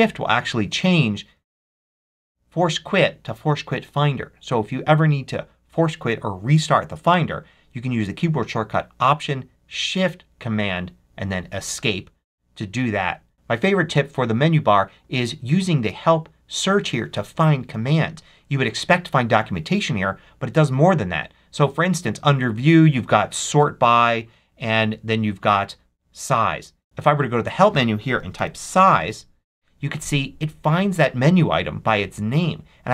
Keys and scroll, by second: 27.9-29.2 typing.